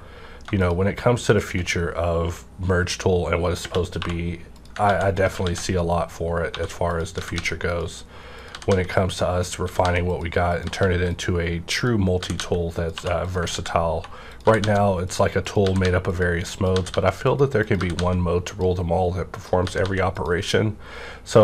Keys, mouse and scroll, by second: 3.6 _, 4.0 2, 4.5 click, 4.9 ctrl+x, 5.4 ctrl+x, 6.5-7.3 typing, 6.9 click, 7.7 click, 8.4 click, 8.5 g, 8.9 click, 9.4 click, 9.6 g, 10.5 click, 10.6 g, 11.1 click, 11.8 click, 12.2-14.6 typing, 12.8 click, 13.2 click, 13.5 ctrl+x, 14.3 click, 15.1 click, 15.6 g, 16.1 click, 16.7 g, 17.3 click, 17.9 g, 18.5 click, 19.3-19.6 typing, 19.3 click, 20.1 click.